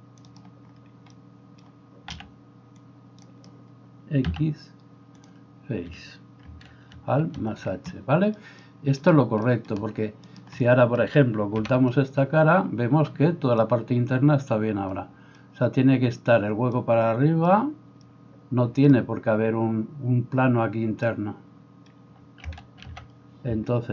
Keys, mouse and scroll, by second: 2.1 c, 4.3 x, 7.3 alt+h, 11.7 h, 22.9 alt+h.